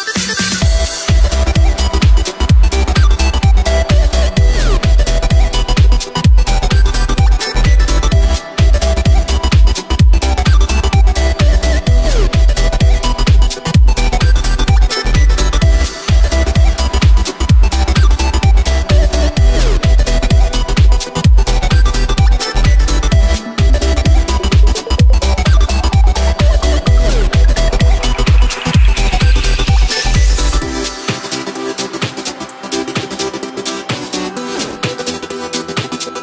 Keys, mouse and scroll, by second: 0.5 KP_1, 1.4-1.7 drag, 1.7 shift+a, 3.7 s, 4.6 r, 6.2 s, 7.3-7.9 middle drag, 7.9 Tab, 8.0 scroll down 1, 8.2-9.0 scroll up 5, 9.0 scroll down 1, 9.1-9.4 scroll up 1, 9.4 2, 9.8 f, 11.2 3, 11.8 e, 15.1 ctrl+b, 18.2 Tab, 19.8 KP_1, 20.1 right click, 20.9 Tab, 21.2 right click, 21.6-22.4 middle drag, 22.4 shift+d, 22.9 p, 23.5 Tab, 23.7 right click, 24.1-25.1 middle drag, 25.1-26.2 drag, 26.2 Tab, 26.6 right click, 27.6 e, 29.6 Tab, 30.0 s, 31.8-32.8 drag, 32.8 s, 34.0 KP_3, 35.4 s.